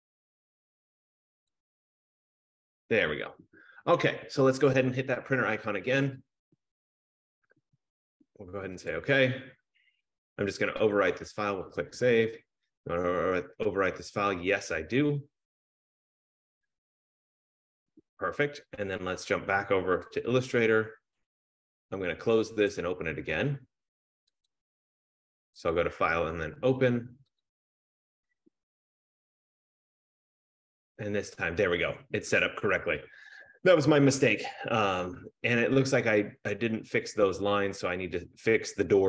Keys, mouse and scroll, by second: 1.8 click, 6.2 click, 9.1 click, 11.4 click, 16.6 click, 18.0 click, 20.8 click, 21.3 F15, 22.8 click, 24.5 click, 25.9 click, 27.4 click, 29.5 click.